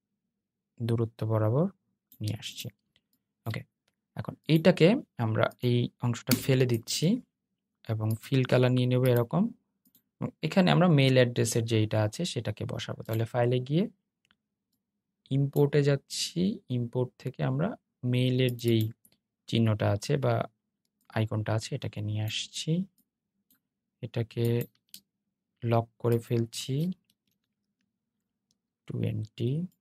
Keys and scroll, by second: 29.7 super+z.